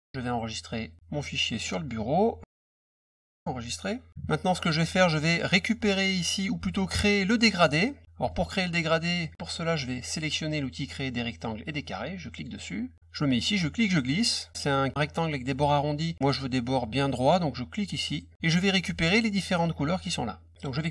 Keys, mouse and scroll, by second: 0.7 click, 1.6 click, 3.3 click, 4.6 middle click, 7.6 middle click, 8.2 middle click, 8.2-8.8 scroll up 2, 8.7 middle click, 12.2 click, 13.3-14.5 drag, 17.9 click.